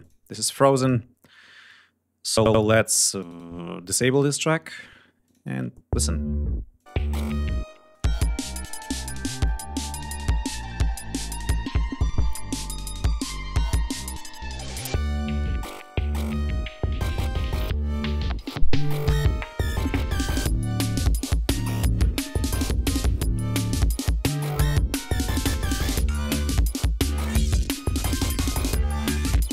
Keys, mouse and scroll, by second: 0.0 click, 0.8 click, 1.3-1.8 scroll up 2, 2.4-2.8 scroll up 2, 3.1 right click, 4.2 click, 5.3 space, 6.6 click, 7.6 space, 7.8 click, 8.5 ctrl+scroll down 2, 9.5-10.7 drag, 10.9 ctrl+scroll up 2, 11.5-12.3 ctrl+scroll down 5, 13.0 scroll down 2, 13.5-14.3 ctrl+scroll up 5, 16.2 scroll down 2, 16.6 ctrl+scroll up 2, 17.1 ctrl+scroll down 3, 21.0 ctrl+scroll down 2, 23.1-23.4 scroll down 2, 23.7 scroll up 2, 24.3 scroll down 2, 25.4-25.7 ctrl+scroll up 2, 26.6 ctrl+scroll down 2, 28.3 ctrl+scroll up 2.